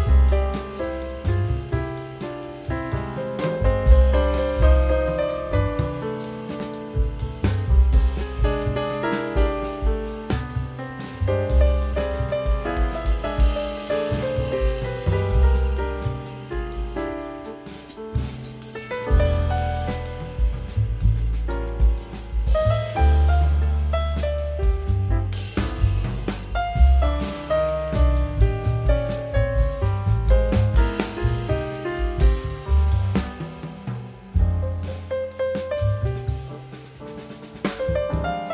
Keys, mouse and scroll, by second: 0.6 scroll down 1, 1.3 ctrl+x, 1.5 typing, 2.0 ctrl+scroll up 1, 4.3 F12, 6.9 double click, 8.9 scroll down 1, 11.7 right click, 13.0 right click, 14.5 scroll down 1, 19.0 ctrl+g, 19.5 scroll up 1, 20.1 scroll up 1, 20.5 shift+click, 25.6-27.2 typing, 29.0-30.8 typing, 29.6 Tab, 30.2 Tab, 34.2 scroll down 1, 35.0 typing, 35.6 scroll up 1, 36.2 typing, 37.4-38.2 typing, 37.5 scroll down 1.